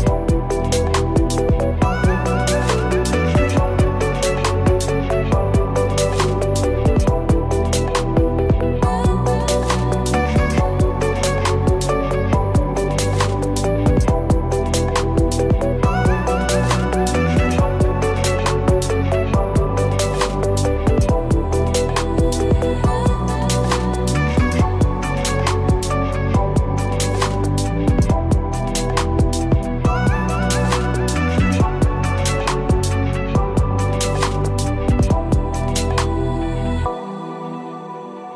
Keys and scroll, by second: 29.8 o.